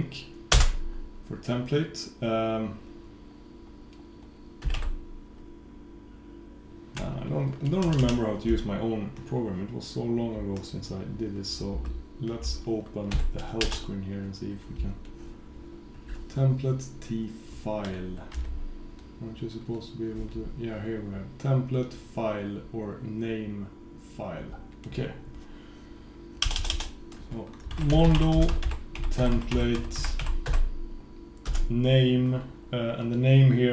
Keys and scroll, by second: 11.8 super+k.